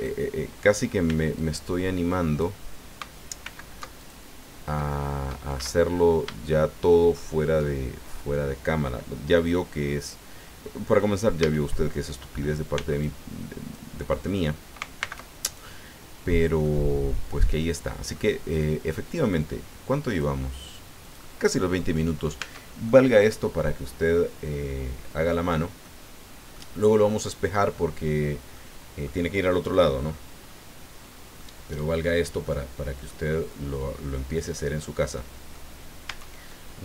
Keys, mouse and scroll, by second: 1.0 b, 1.3-2.6 drag, 3.4 alt+m, 4.0 alt+click, 5.9 shift+scroll down 3, 6.5-7.7 shift+drag, 7.8 shift+scroll up 3, 11.4 a, 12.7 b, 13.0 click, 15.0 alt+m, 15.4 alt+click, 16.2 scroll down 2, 16.6-19.5 middle drag, 20.1 click, 21.0 click, 21.8-22.1 scroll down 1, 22.4 Tab, 22.9-25.4 drag, 25.4-25.8 scroll down 1, 25.8 click, 26.8-27.2 scroll up 1, 28.5 click, 30.1-30.7 scroll up 2, 31.0-31.3 scroll down 2, 31.4 click, 32.4 click, 33.3 click, 33.3-35.0 middle drag, 35.1 middle click, 36.0 Tab, 36.5-36.8 drag.